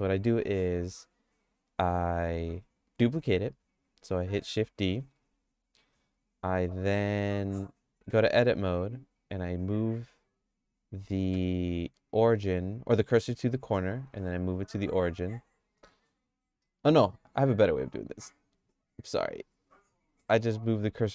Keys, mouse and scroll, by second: 5.1 shift+d, 8.1 Tab, 9.6 click, 11.3 q, 13.7 Tab, 14.0 q, 18.0 click, 19.2 Tab, 20.6 q.